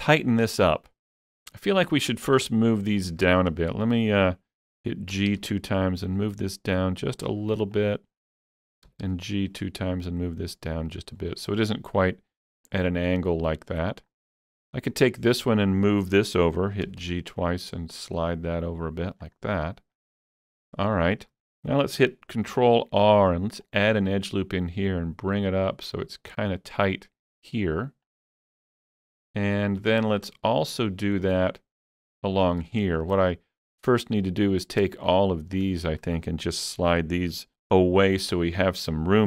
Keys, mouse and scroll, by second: 1.5-3.4 shift+middle drag, 2.9 click, 3.4-5.2 shift+middle drag, 5.2 g, 7.2 click, 7.2 g, 7.8 click, 8.9 g, 9.1 g, 10.9 click, 12.1-16.9 middle drag, 14.7 click, 16.9 g, 17.1 g, 19.3 g, 20.0 middle click, 21.0-23.7 shift+middle drag, 22.6 ctrl+r, 23.7 click, 28.1 ctrl+r, 28.1 click, 28.1 shift+middle click, 29.2 middle click, 29.2 click, 30.1-32.8 shift+middle drag, 32.8 shift+middle click, 34.6 click, 35.1 shift+click, 35.6 shift+click.